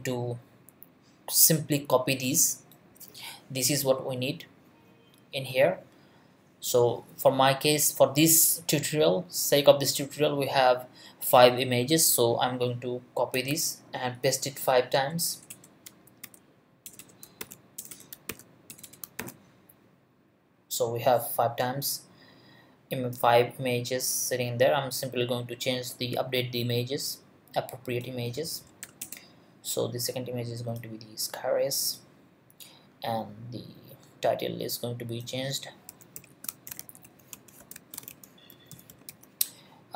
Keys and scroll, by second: 13.5 super+c, 15.3 Return, 16.0 super+Return, 16.2 super+v, 16.8 super+Return, 17.2 super+Return, 17.4 super+v, 17.8 super+Return, 18.1 super+Return, 18.3 super+v, 18.7 super+Return, 19.0 super+Return, 19.2 super+v, 28.8 shift+', 29.0 shift+Return, 35.7-39.6 typing.